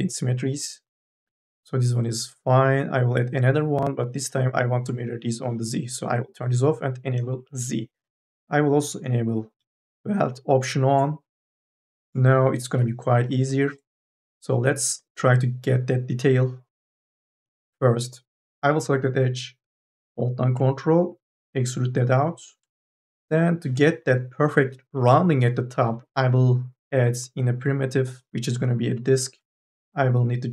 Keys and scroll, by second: 12.4 2, 12.8 e.